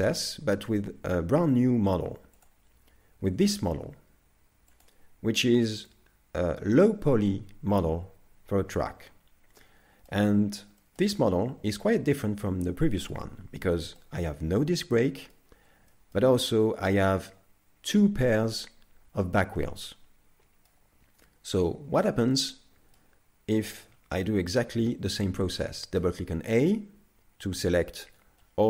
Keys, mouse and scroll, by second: 2.4 click, 3.2-4.1 scroll down 1, 4.1 scroll down 1, 4.7 click, 6.7 middle click, 10.8 shift+middle click, 11.2 middle click, 13.6 scroll up 2, 14.0 middle click, 15.9 shift+middle click, 16.4 middle click, 19.7 middle click, 21.1-21.6 scroll down 2, 21.6 shift+middle click, 22.4 middle click, 26.0 a.